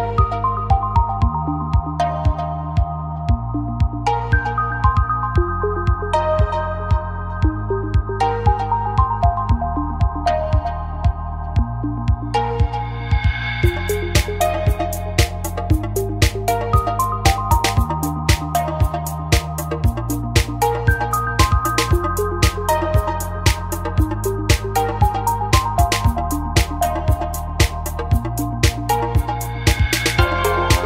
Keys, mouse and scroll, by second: 1.7 g, 4.9 n, 5.8-7.8 drag, 7.8 g, 12.9 right click, 13.8 g, 20.5 g, 25.4 n, 25.6 n, 26.5 click, 26.6 n, 27.2-29.6 middle drag, 27.2 right click, 29.6 a, 30.0 a, 30.6 middle click.